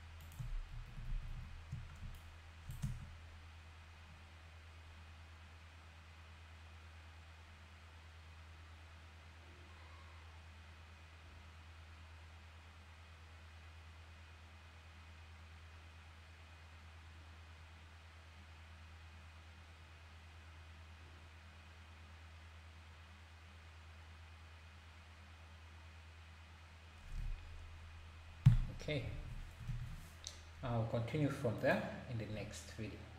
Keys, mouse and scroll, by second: 0.8 shift+r, 1.0 shift+r, 2.2-2.8 shift+right drag, 2.8 space, 28.5 Escape, 29.2 ctrl+s, 29.7 ctrl+s.